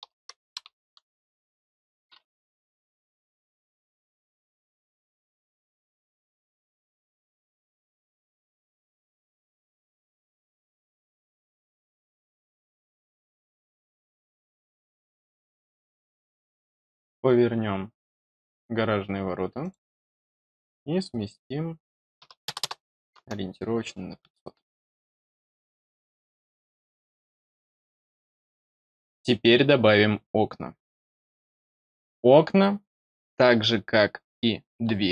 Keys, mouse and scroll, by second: 2.0-2.5 scroll down 2, 2.5 middle click, 4.2 click, 5.5 scroll down 2, 6.3 click, 8.9 click, 11.9 click, 19.5 click, 25.3 scroll down 2, 26.0 scroll down 2, 26.3-26.9 middle drag.